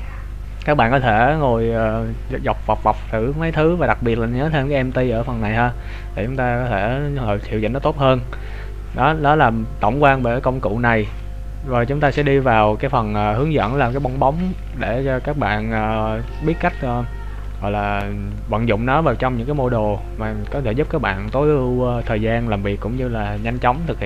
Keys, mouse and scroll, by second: 0.1 scroll down 1, 0.7 scroll down 2, 5.2 click.